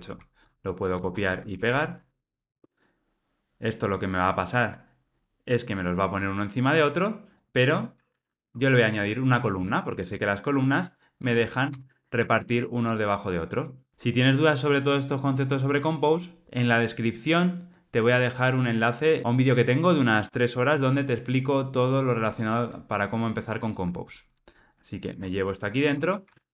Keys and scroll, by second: 0.9 super+c, 11.1 Return, 25.1 super+x, 26.2 super+v.